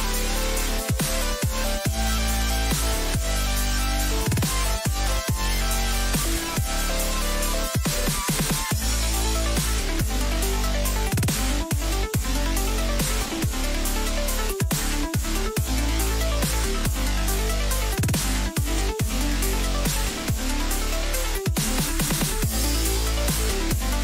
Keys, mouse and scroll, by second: 20.4-22.9 middle drag.